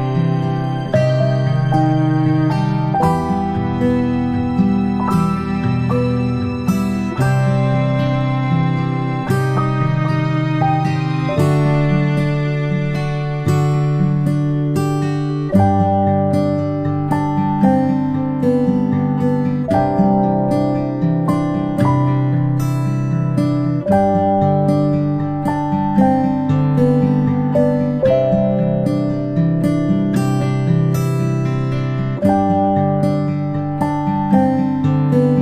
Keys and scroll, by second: 7.3 space, 7.5 space, 21.6-22.1 ctrl+space, 27.9 space, 28.2 space, 28.5 p, 30.0 space, 31.2 space, 31.4 space.